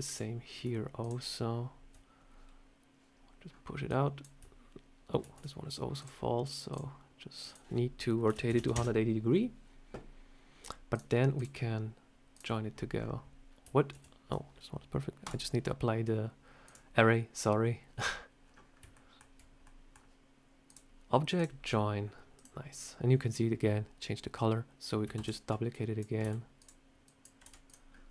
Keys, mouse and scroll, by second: 0.9 shift+click, 3.7 click, 5.1 ctrl+z, 5.8 click, 6.6 click, 7.3 click, 10.8 click, 11.2 click, 12.8 scroll down 4, 13.8 ctrl+z, 15.1 click, 16.5 click, 18.3-18.7 scroll up 3, 18.8 shift+middle click, 19.5 middle click, 20.5 click, 22.2 click, 25.0 shift+d, 25.6 click, 26.1 s, 26.9 click, 27.3 s, 27.8 scroll up 3, 27.9 middle click.